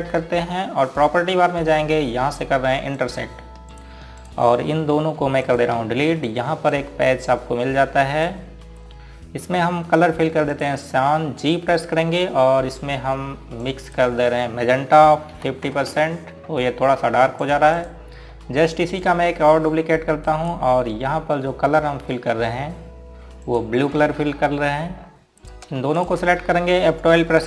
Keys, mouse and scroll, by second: 0.6 click, 4.0 click, 6.2 Delete, 6.5 click, 6.7 Delete, 7.3 click, 12.9 g, 14.7 click, 16.4 KP_5, 16.7 KP_0, 17.0 KP_Enter, 18.5 click, 19.4 scroll up 1, 20.1 click, 21.3 right click, 24.5 click, 27.0 shift+click.